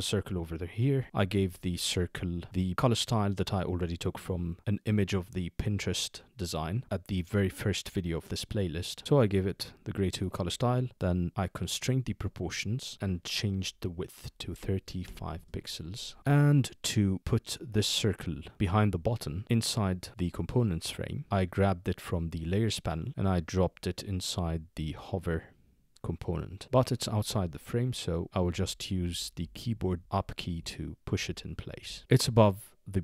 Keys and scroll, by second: 14.2-15.0 typing, 15.3 Return, 21.9-22.6 typing, 28.5 shift+Up, 29.0 shift+Up, 29.4 shift+Up, 31.2 shift+Down, 31.9 Up, 32.0 Up.